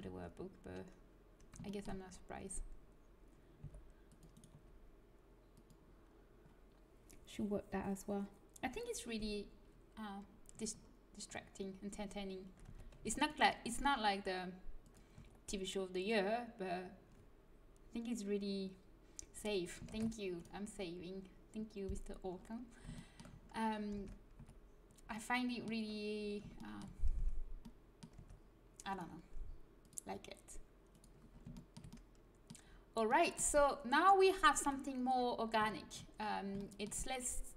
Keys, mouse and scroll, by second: 3.5 c, 4.4 g, 12.6 a, 13.0 c, 13.6 g, 15.1 a, 19.8 ctrl+s, 23.9 Tab, 24.3 z, 27.1 Tab, 28.1 Tab, 28.9-30.0 drag, 31.4-32.9 drag, 34.6 KP_1.